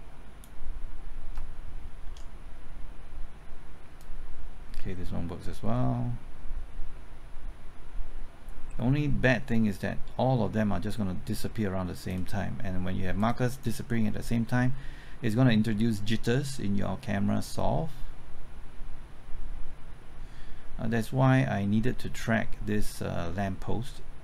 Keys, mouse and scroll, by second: 2.0 ctrl+t, 4.0-12.5 drag, 13.6-13.9 scroll down 1, 13.9 middle click, 16.2-24.2 drag.